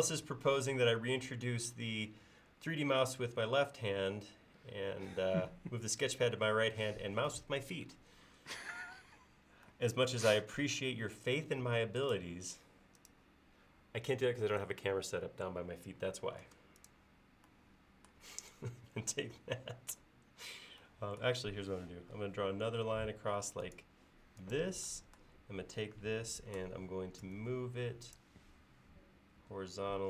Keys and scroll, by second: 16.5 space, 22.6 l, 27.3 m.